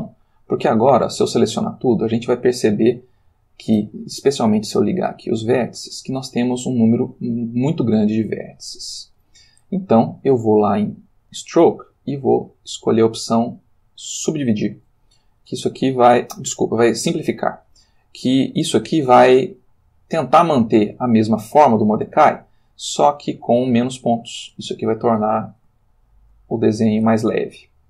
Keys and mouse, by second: 0.6 a, 1.5-3.2 ctrl+middle drag, 3.4 ctrl+middle click, 4.9 click, 5.8 ctrl+middle click, 6.9-9.4 ctrl+middle drag, 11.0 click, 13.8 click, 15.3 ctrl+click, 17.7-19.3 ctrl+drag, 19.6 ctrl+middle click, 20.0 ctrl+click, 20.9 ctrl+shift+middle click, 21.7 ctrl+shift+middle click, 22.6 ctrl+shift+middle click, 23.8 shift+middle click, 24.7 ctrl+shift+middle click, 25.9 shift+middle click.